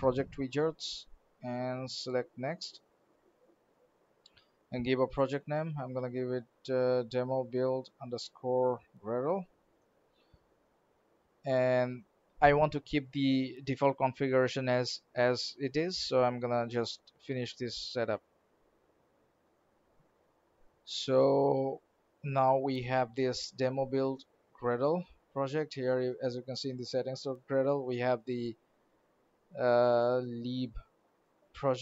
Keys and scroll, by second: 2.7 alt+n, 17.8 alt+f.